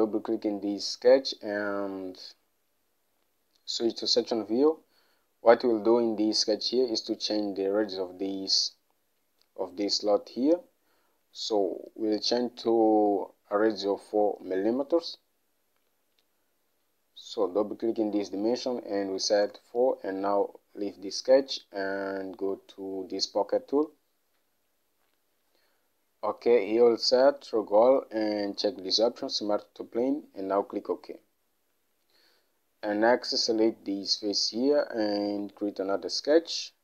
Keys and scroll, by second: 19.3 4, 19.6 Return.